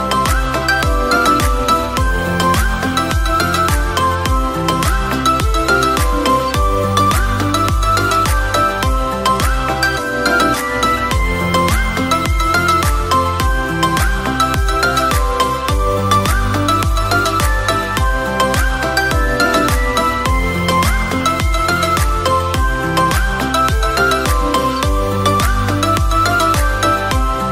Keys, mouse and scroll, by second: 1.4 l, 3.7 s, 5.5 KP_7, 9.0-10.1 drag, 10.9-11.5 drag, 14.4 click, 16.1 middle click, 17.0 drag, 19.2 click, 21.1 click, 22.6-23.8 middle drag, 23.8 click, 24.9 click, 26.6 Tab, 27.0 click.